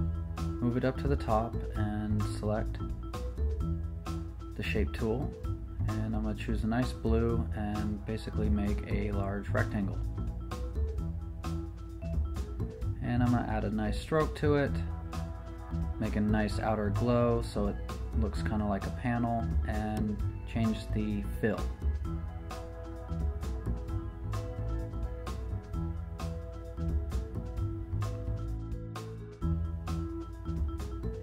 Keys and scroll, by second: 0.3 shift+super+n, 0.8 Return, 11.4 v.